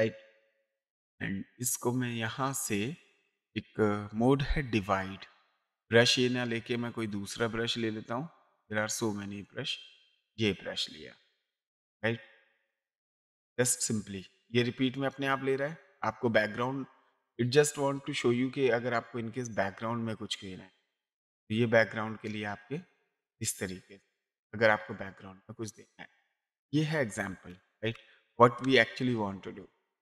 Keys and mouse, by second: 2.0 click, 4.5 click, 6.5 click, 9.1 click, 12.8 ctrl+z, 13.8 click, 19.6 click, 21.1 click, 22.2 click, 27.4 ctrl+a, 27.8 Delete.